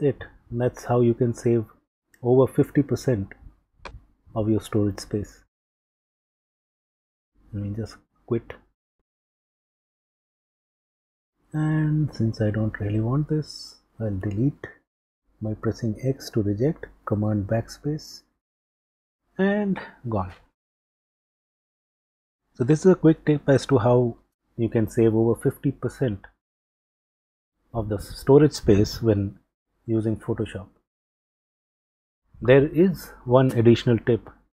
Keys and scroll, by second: 0.4 super+q, 7.5 q, 8.9 super+q, 12.9 x, 16.3 super+BackSpace.